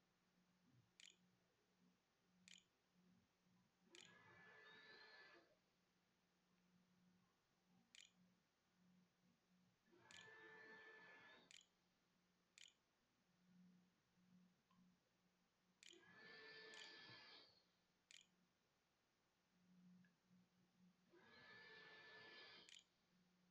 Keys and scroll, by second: 0.0-4.7 typing, 6.3 u, 7.5-12.9 typing, 14.7-15.8 typing, 16.9-18.6 typing, 20.6 i, 21.7-23.5 typing.